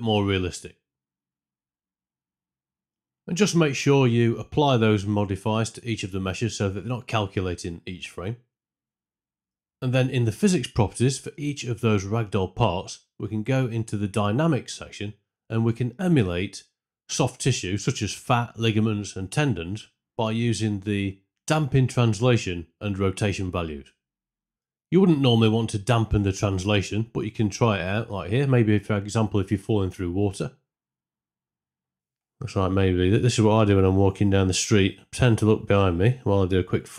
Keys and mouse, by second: 0.4 space, 2.8 shift+Left, 6.5-8.3 right drag, 11.9 click, 14.0 click, 17.7-19.0 drag, 20.3 space, 24.4 space, 27.4-28.4 alt+drag, 29.6 space.